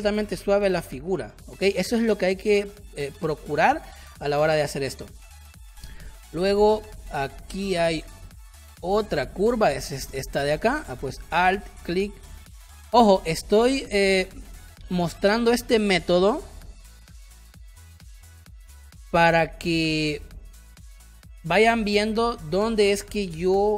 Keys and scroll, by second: 6.1 space, 9.7 space, 12.8 space.